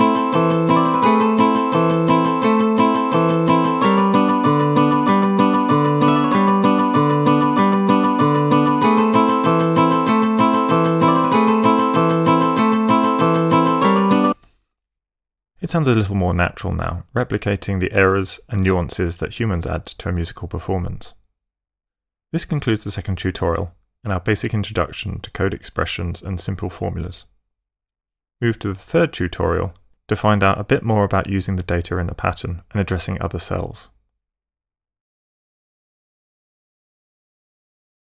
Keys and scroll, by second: 14.1 space.